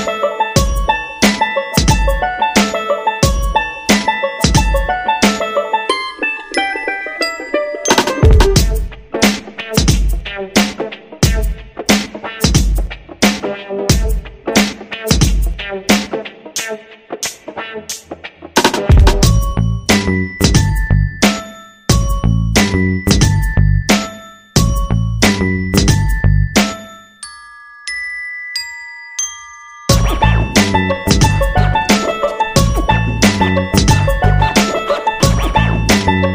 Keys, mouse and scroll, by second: 30.3 click.